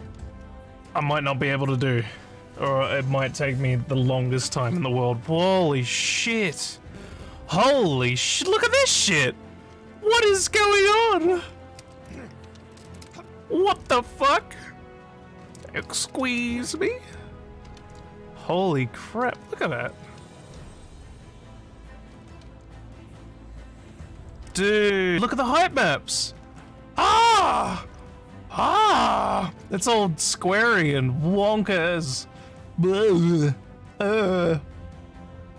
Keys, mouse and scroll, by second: 7.5-24.5 typing, 25.8-30.7 typing, 33.9 w.